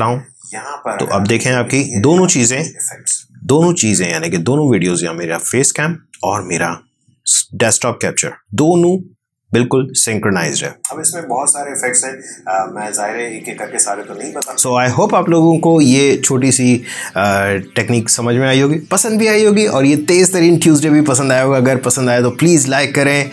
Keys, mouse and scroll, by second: 3.1 space, 10.4 space, 14.2 space.